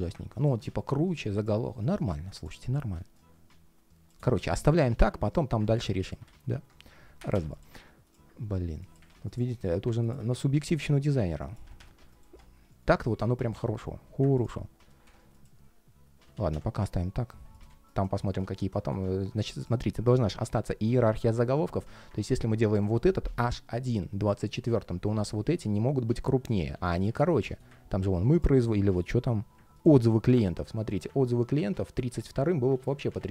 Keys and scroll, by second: 12.9 ctrl+shift+4, 15.9 super+z, 26.4 super+z, 32.5 super+z.